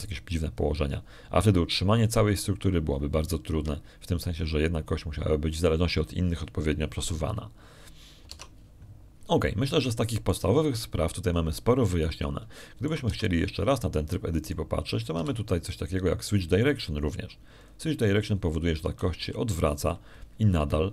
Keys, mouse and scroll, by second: 5.4 Escape, 10.2 alt+Tab, 11.2 middle click, 11.6 shift+click, 13.2 middle click, 13.7 middle click, 14.4 shift+click, 14.9 shift+Tab, 16.3 right click, 17.0 w, 19.4 click.